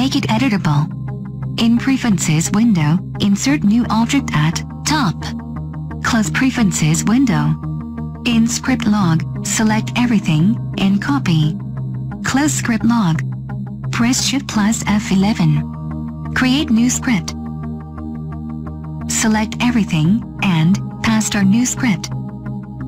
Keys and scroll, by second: 8.7 ctrl+a, 11.6 ctrl+c, 19.4 ctrl+a, 21.3 ctrl+v.